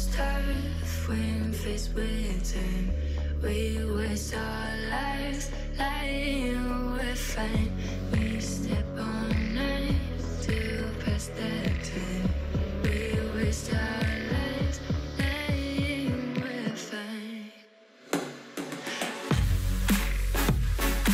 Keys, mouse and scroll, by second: 0.6 KP_3, 1.5 alt+z, 1.8 shift+middle click, 2.0 scroll down 1, 2.1 click, 3.3 scroll up 3, 3.5 shift+middle click, 3.9 shift+a, 5.4 s, 6.2 g, 7.0-7.4 scroll up 3, 7.4 s, 8.3 s, 9.0 g, 10.2 s, 11.3 g, 12.5 ctrl+r, 13.5 click, 13.8 s, 14.4 g, 14.9 scroll up 1, 15.0 shift+middle click, 15.2 click, 15.5 g, 16.3 s, 17.0 g, 17.9 click, 18.3 s, 19.5 KP_7, 19.8 scroll down 2, 20.1 shift+middle click, 20.3-21.0 scroll up 4, 21.0 click.